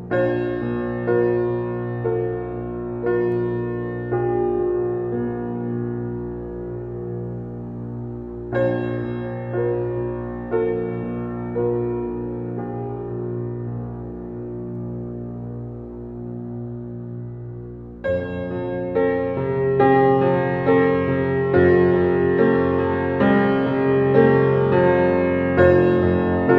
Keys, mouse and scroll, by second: 0.0 r, 3.2 click, 3.9 g, 5.9 click, 6.1-7.1 middle drag, 7.1 alt+z, 7.4 click, 7.6 middle click, 8.5 click, 10.1-10.9 scroll up 2, 10.9 click, 11.4 s, 12.9 alt+middle click, 13.4 alt+middle click, 13.6 alt+middle drag, 14.1 shift+middle drag, 14.3 scroll up 3, 14.5-14.9 shift+middle drag, 14.9 s, 16.0-16.5 drag, 16.5 s, 17.3 g, 19.0 g, 21.1-21.5 middle drag, 21.5 scroll up 1, 21.6-22.4 scroll down 7, 22.4 click, 22.9 click, 23.3-23.8 scroll down 3, 23.8-24.1 shift+middle drag, 24.1-25.0 scroll up 2, 25.0 click.